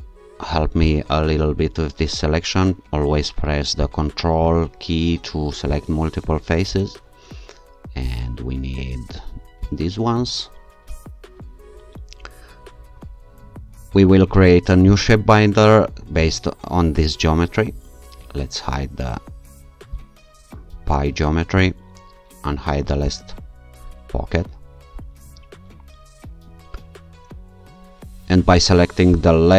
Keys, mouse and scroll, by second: 0.8 click, 3.8 ctrl+click, 5.7 ctrl+click, 9.7 ctrl+shift+click, 11.0-11.8 scroll down 2, 14.9 shift+click, 20.0 click, 23.1 click, 29.1 click.